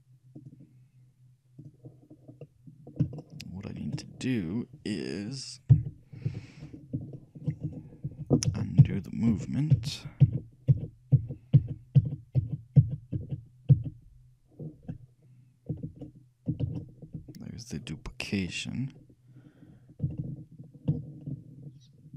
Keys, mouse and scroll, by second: 0.5-2.2 drag, 2.2-2.5 scroll up 1, 2.5-3.6 middle drag, 5.0-5.8 scroll down 1, 5.8 shift+KP_3, 6.4 KP_1, 7.3-9.0 shift+middle drag, 8.2 ctrl+z, 8.7 ctrl+z, 9.0 ctrl+z, 9.5 ctrl+z, 10.5 ctrl+z, 10.8 ctrl+z, 11.3 ctrl+z, 11.7 ctrl+z, 12.1 ctrl+z, 12.5 ctrl+z, 13.0 ctrl+z, 13.3 ctrl+z, 13.9 ctrl+z, 15.4-17.0 middle drag, 16.8 ctrl+shift+z, 18.4 middle click.